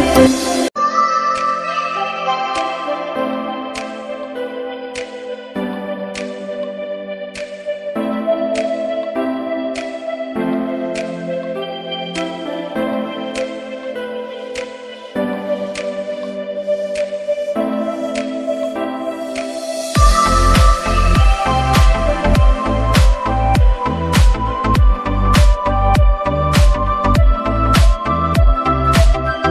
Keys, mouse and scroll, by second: 0.1 click, 3.4 click, 8.1 click, 13.8 click, 19.2 shift+Num_Lock, 19.4-21.9 typing, 24.6 click.